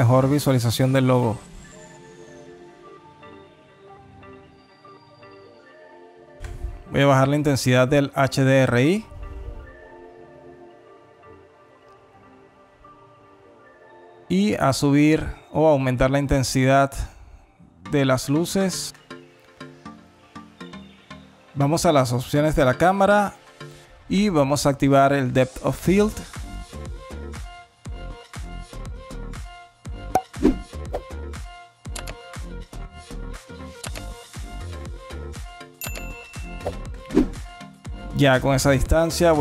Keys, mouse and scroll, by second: 0.4 middle click, 2.0 click, 3.4 click, 3.9 click, 6.3 click, 12.0 click, 13.5 click, 14.1 click, 14.4 click, 17.3 click, 18.2 click, 22.1 click, 23.7 click, 26.8 shift+click.